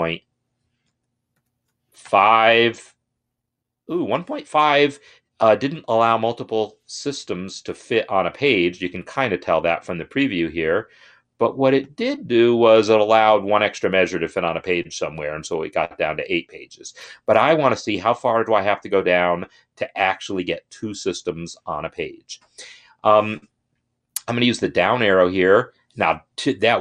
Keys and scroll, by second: 0.7 shift+Right, 24.7 Down.